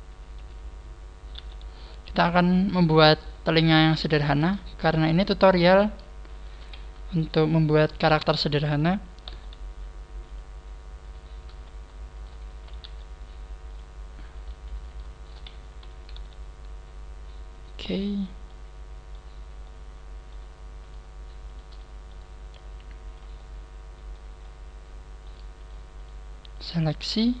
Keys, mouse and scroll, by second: 0.1 scroll up 2, 1.3 g, 2.2 click, 3.1 right click, 5.5 scroll up 1, 6.3 shift+right click, 6.3 z, 7.8 scroll up 1, 7.8 z, 10.2 g, 10.3 click, 10.9 click, 10.9 right click, 11.4 z, 12.3 shift+right click, 12.5 z, 12.8 g, 13.7 click, 14.3 right click, 14.7 z, 15.1 shift+right click, 15.5 z, 16.1 g, 18.5 click, 18.5 middle click, 19.3 scroll down 2, 19.6 middle click, 20.7 right click, 21.4 shift+right click, 21.7 middle click, 22.5 click, 23.3 middle click, 24.3 middle click, 25.5 right click, 25.9 shift+right click, 26.5 shift+right click.